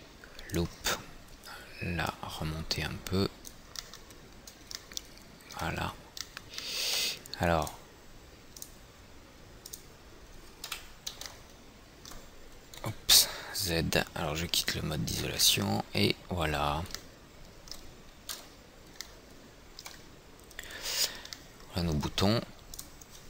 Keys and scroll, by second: 11.2 F4, 13.4 z, 18.9 z.